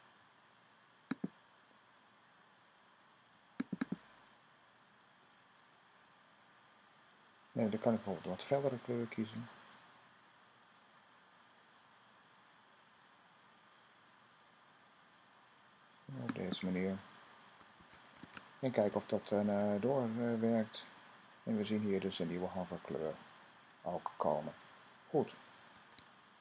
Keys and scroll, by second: 17.5 super+s, 19.2 super+r.